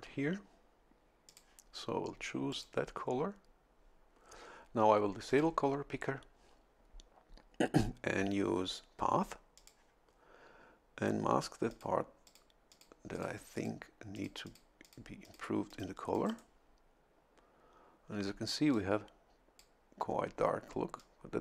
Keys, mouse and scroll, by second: 1.3 click, 2.5 click, 5.3 click, 9.6 click, 11.7 click, 12.3 click, 12.7 click, 13.1 click, 13.5 click, 14.1 click, 14.8 click, 15.2 click, 15.7 click, 16.1 click, 16.2 right click, 18.7-19.8 drag, 21.0-21.4 drag.